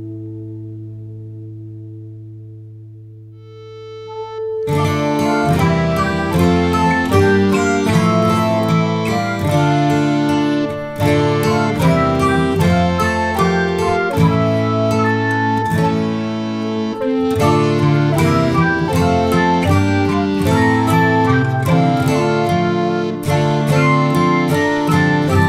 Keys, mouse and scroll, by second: 0.9 click, 2.2-3.4 drag, 4.1-5.2 drag, 6.2 click, 6.5 click, 7.4 ctrl+s, 8.5 shift+click, 9.5-10.8 scroll up 2, 10.8-11.3 drag, 12.4-15.1 drag, 16.0-16.8 scroll down 1, 16.8 click, 17.5 click, 18.0-18.5 middle drag, 18.5 scroll up 3, 18.8 ctrl+s, 21.7-22.6 scroll down 2, 21.8 middle click, 22.1 click, 22.6 ctrl+s, 22.8 middle click, 23.0-23.7 scroll up 4, 23.7 scroll down 2, 24.1-24.6 middle drag, 24.6 shift+click, 24.8 middle click, 25.2 ctrl+s, 25.4 click.